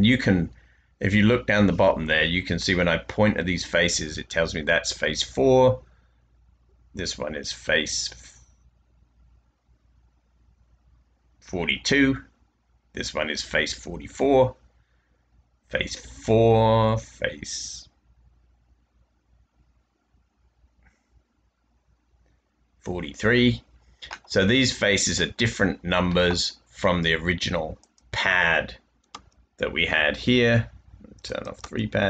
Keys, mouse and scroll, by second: 29.1 space, 31.5 space.